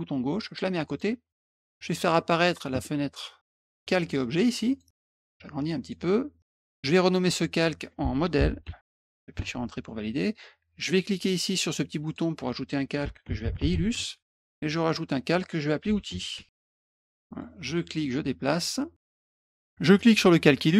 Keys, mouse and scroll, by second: 1.5 middle click, 1.6 middle click, 2.2 middle click, 3.6 click, 4.7 click, 5.4 click, 7.2 click, 7.3 click, 8.1-9.3 typing, 12.0 click, 12.7-14.2 typing, 14.8 click, 15.6-16.7 typing, 17.4-19.1 middle drag, 19.9 click.